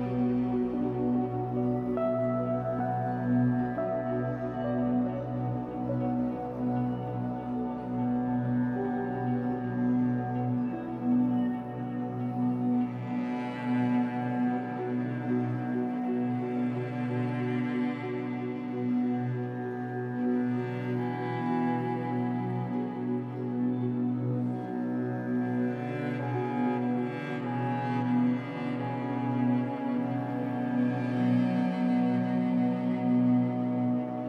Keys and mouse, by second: 4.6 click, 4.8-7.9 drag, 9.4 click, 11.2 click, 13.3 click, 13.5 click, 15.5 click, 15.7 click, 17.8 click, 18.0 click, 21.7 click, 23.6 click, 23.8 click, 25.2 click, 26.7 click, 28.9 click, 30.1 shift+click, 31.2 shift+click, 31.9 shift+click, 32.3 shift+click.